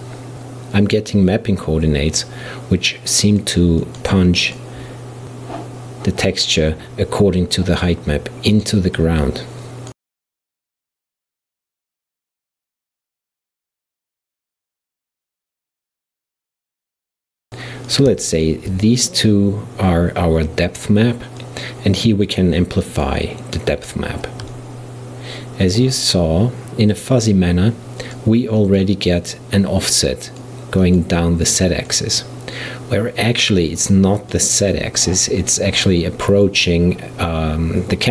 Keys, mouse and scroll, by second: 0.0 click, 4.3 click, 5.1 shift+d, 6.6 click, 8.7-12.0 drag, 14.2-15.7 drag, 16.2 click, 16.6-18.0 drag, 18.4 shift+click, 21.4 click, 24.6-27.0 middle drag, 27.0-33.0 drag, 33.8-35.0 drag.